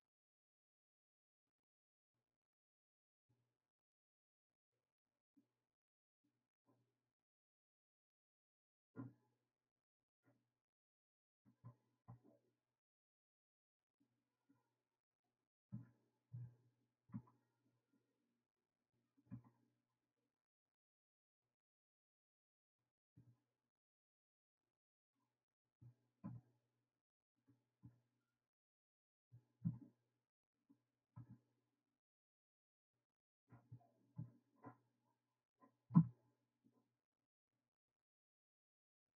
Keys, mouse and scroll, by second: 10.3 click, 13.6 shift+a, 15.7 g, 23.7-25.1 scroll up 4, 25.1-26.2 drag, 26.2 KP_1, 27.8 g, 29.6 KP_3, 31.1 g, 34.2 KP_1, 38.0 click.